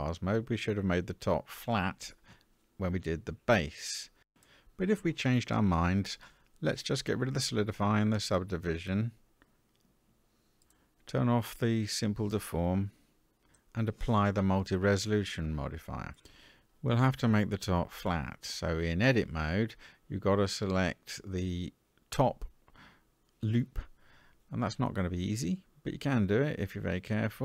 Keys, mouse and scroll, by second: 5.9 click, 7.2 click, 10.5 click, 11.8-13.0 drag, 17.5 Tab, 18.4 shift+middle click, 19.2-20.4 scroll up 4, 21.3 alt+a, 22.0 middle click, 22.9-23.8 scroll up 3, 23.9-25.2 shift+middle drag.